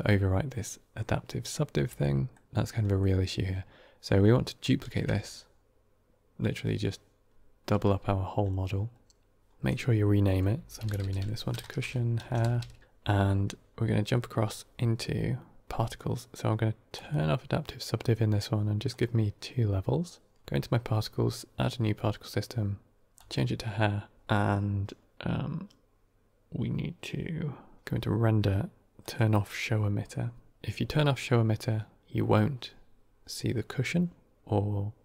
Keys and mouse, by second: 1.9 middle drag, 2.8 middle click, 4.8 shift+d, 9.5-12.8 drag, 16.9 click, 18.8 drag, 29.0 click.